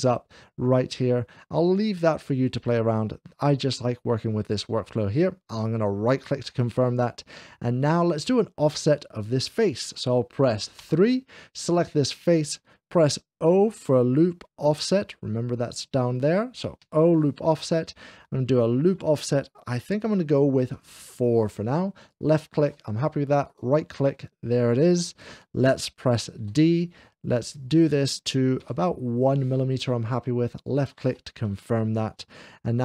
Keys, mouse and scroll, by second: 5.9-7.1 right drag, 7.1 middle click, 10.8 3, 11.5 click, 16.9 o, 20.7 3, 20.7 4, 21.8 click, 23.3-24.5 right drag, 24.5 middle click, 26.4 d, 28.7 1, 30.4 click.